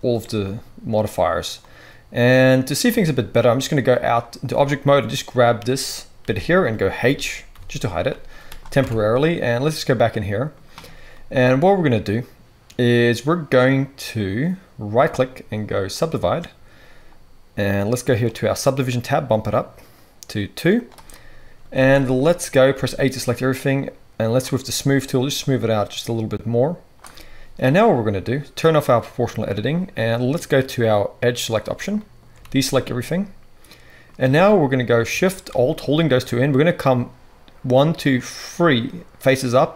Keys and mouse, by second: 2.8 Tab, 4.0-15.0 middle drag, 6.2 g, 7.0 j, 7.5 h, 8.7 Tab, 15.0-18.5 right drag, 18.2 click, 18.2 middle click, 21.7 alt+a, 22.7 a, 28.6-31.4 drag, 32.4 alt+a, 34.4-39.7 middle drag.